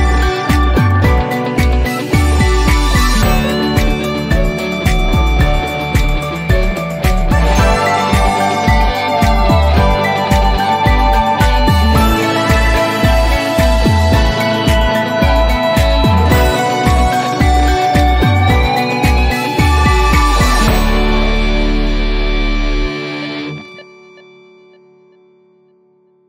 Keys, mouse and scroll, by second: 1.6 click, 4.2 click, 5.1 typing, 7.9-8.6 typing, 11.7 click, 13.8 click, 15.6 click.